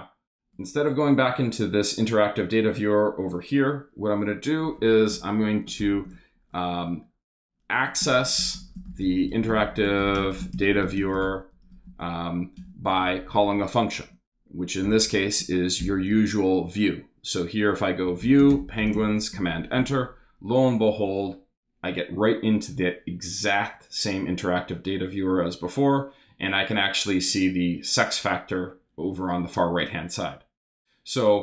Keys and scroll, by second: 5.1 Return, 5.6 shift+Return, 5.8 shift+3, 5.9 shift+space, 7.5-12.1 typing, 12.6 Return, 13.9-15.8 typing, 17.8-19.4 typing.